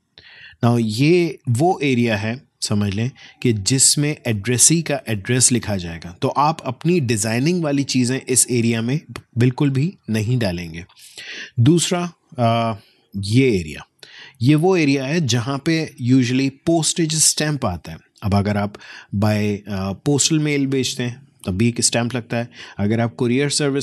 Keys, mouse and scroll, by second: 11.6-16.1 drag.